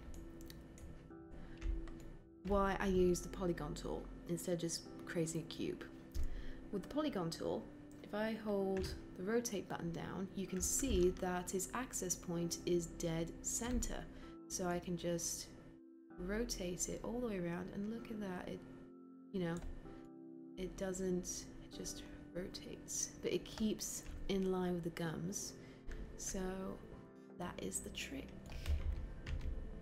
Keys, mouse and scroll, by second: 8.7 e.